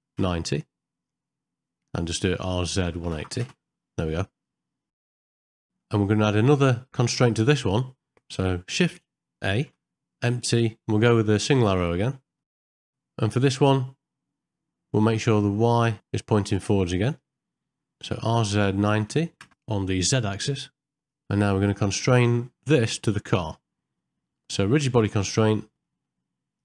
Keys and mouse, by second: 5.0 middle click, 5.2 middle click, 5.5 ctrl+middle click, 5.6 shift+middle click, 5.8 middle click, 9.5 shift+a, 12.4 ctrl+middle click, 12.5 shift+middle click, 12.7 middle click, 20.4 ctrl+middle click, 20.7 shift+middle click, 20.8 middle click, 21.4 shift+middle click, 25.8 middle click.